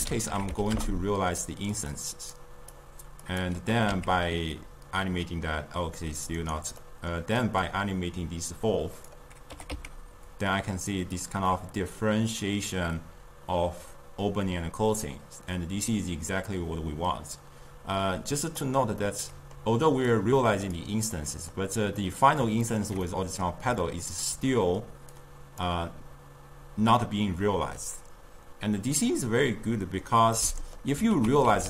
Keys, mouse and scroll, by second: 2.3-3.4 drag, 3.7 g, 6.8-7.6 middle drag, 7.6 drag, 9.5 g, 19.0-20.1 middle drag, 20.1 click, 21.2-24.6 middle drag, 24.6-25.1 scroll up 1, 25.1 click, 30.4-31.1 middle drag, 31.1 ctrl+a.